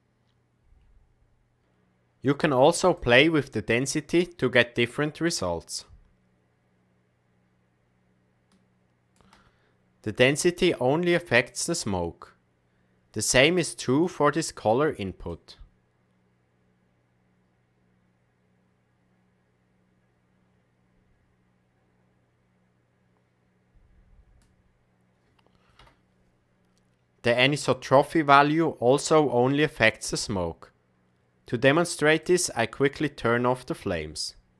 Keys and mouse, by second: 2.9-9.1 shift+drag, 13.8 click, 32.2 click.